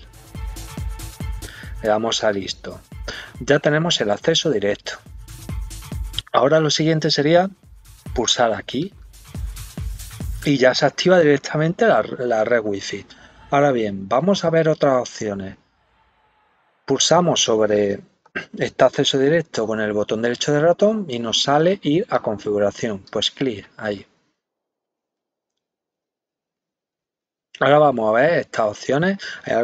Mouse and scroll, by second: 2.2 click, 8.8 click, 18.9 right click, 22.1 click, 27.9-28.6 scroll down 4.